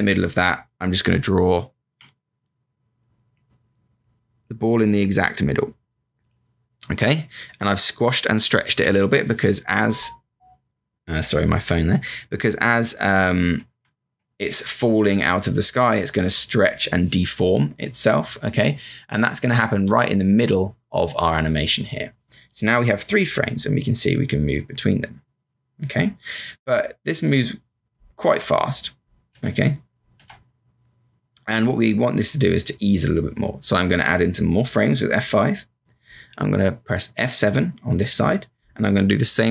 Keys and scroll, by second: 1.9 b, 7.5 v, 8.8 q, 13.7 Up, 19.9 m, 26.6 Return, 28.1 Return, 34.6 F5, 34.9 F5, 37.1 F7.